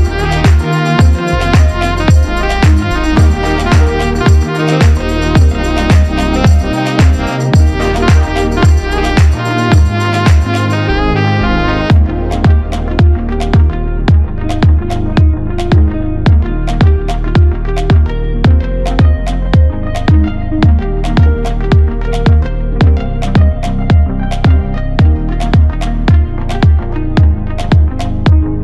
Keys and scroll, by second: 0.7 Return, 6.0 alt+7, 7.2 Escape, 8.4 Delete, 9.7 alt+a, 17.3 Return, 20.7 Escape, 27.3 F2, 28.2 Return.